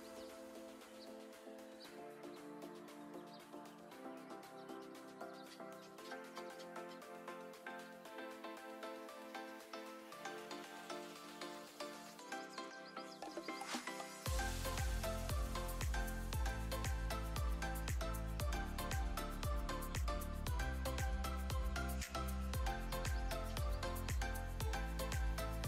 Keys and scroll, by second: 0.4-1.0 typing, 1.9 Return, 12.9 alt+space, 13.8 alt+space, 16.8 7, 17.0 0, 17.6 Return, 20.0 space, 20.5 space.